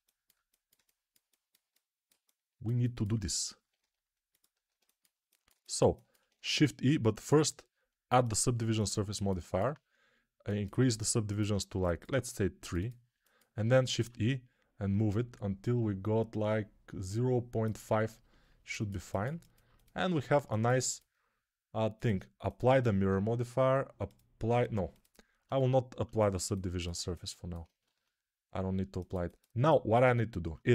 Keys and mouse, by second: 8.6-18.1 ctrl+alt+drag, 13.8 shift+e, 18.1-22.9 ctrl+alt+middle drag, 19.9 Tab, 22.9-25.3 drag, 25.3-30.7 ctrl+middle drag, 25.4 ctrl+Tab.